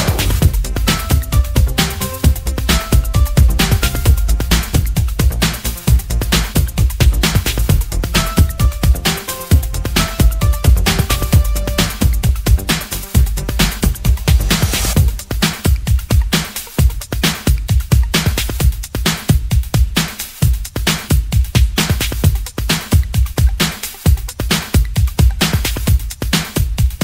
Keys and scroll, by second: 21.1 x.